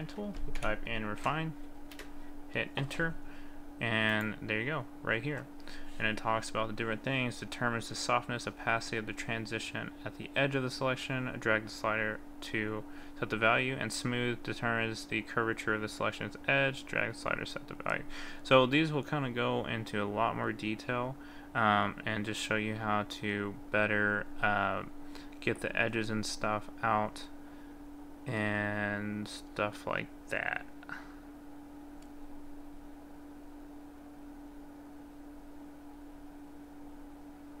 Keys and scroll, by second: 1.9 Return.